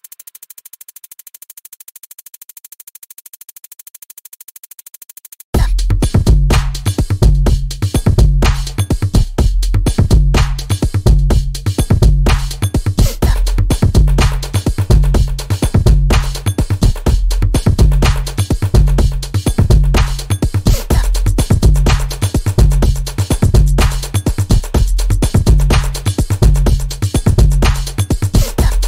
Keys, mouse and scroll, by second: 1.9 scroll down 1, 2.3 click, 3.4 scroll up 1, 3.9 click, 5.0 scroll up 1, 5.2 scroll down 1, 5.7-6.2 scroll up 1, 6.2 click, 7.6 scroll up 1, 8.0-14.7 drag, 16.1 click, 16.5-16.8 scroll up 1, 17.4 click, 17.7 space, 17.8-20.2 drag, 21.0 click, 22.7 Delete, 24.5 click, 25.8 typing, 26.7 Return, 27.7 click.